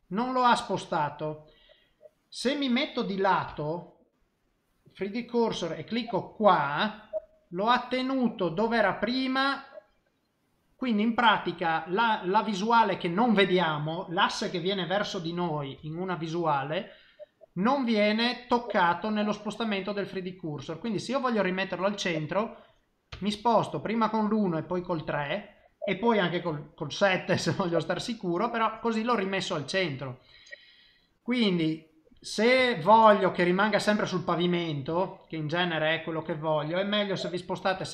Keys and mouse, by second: 3.5 KP_1, 6.4 click, 7.3 middle click, 10.5 middle click, 15.7 KP_1, 22.0 click, 23.1 KP_3, 24.6 click, 26.4 KP_7, 28.2 middle click, 29.9 middle click, 32.4 middle click, 32.9 shift+middle click, 34.0 middle click, 35.2 shift+middle click, 37.7 KP_7.